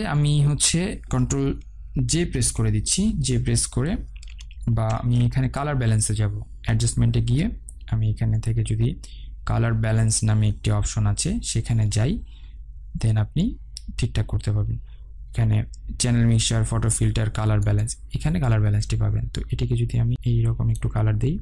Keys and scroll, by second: 2.4 ctrl+j, 5.5 ctrl+z.